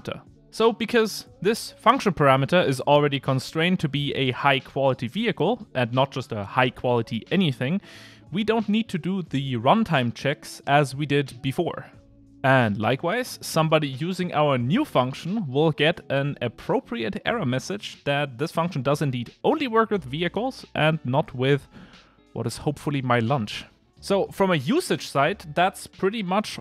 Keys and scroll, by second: 3.8 Return, 7.4 super+c, 8.7 super+v, 11.1 Return, 13.4 Return.